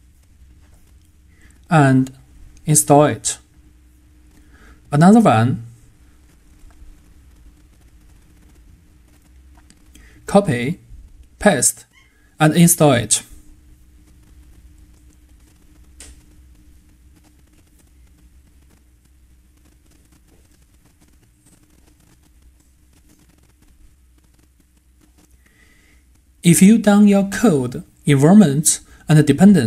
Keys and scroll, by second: 3.0 super+c, 10.1 super+v.